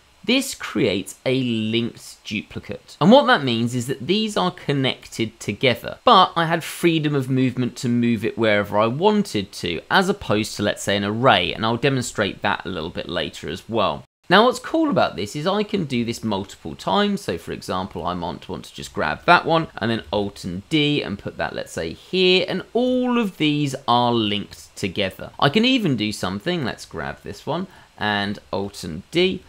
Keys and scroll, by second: 20.1 alt+d, 29.2 alt+d.